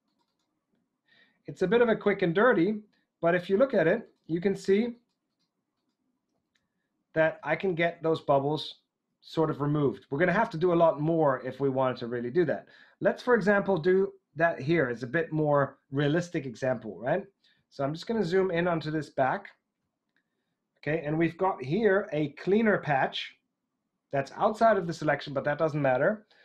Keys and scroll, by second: 6.3 super+z, 7.3 super+z.